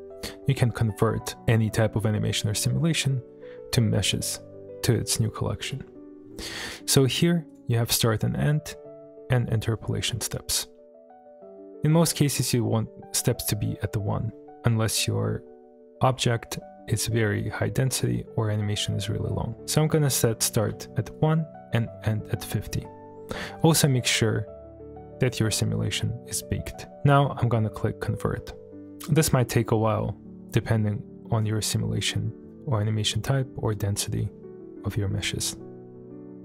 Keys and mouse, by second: 4.1-4.7 middle drag, 6.7 click, 17.0-17.8 middle drag, 19.6-21.2 drag, 23.6-24.9 middle drag, 28.8-34.8 drag.